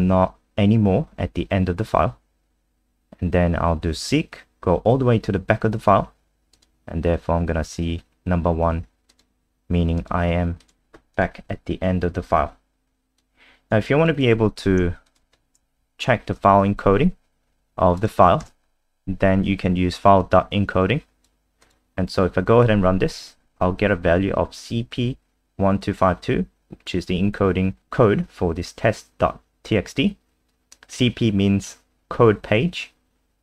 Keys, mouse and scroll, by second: 11.7-12.5 scroll down 2, 12.5-13.2 scroll down 1, 13.2 click, 14.2 ctrl+c, 14.5 click, 15.0 shift+click, 16.3 ctrl+v, 17.9 click, 18.4 ctrl+s, 20.2 click, 22.6 F5, 27.8 click.